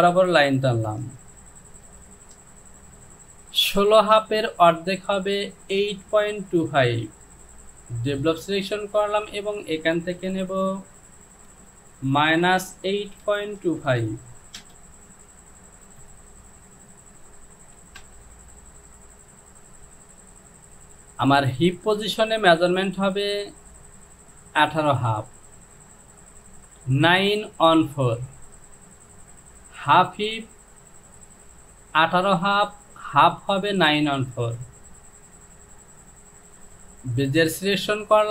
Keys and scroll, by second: 12.1 KP_Subtract, 12.8 KP_8, 13.3 KP_Decimal, 13.7 KP_2, 13.9 KP_5, 14.6 Return, 18.0 Return.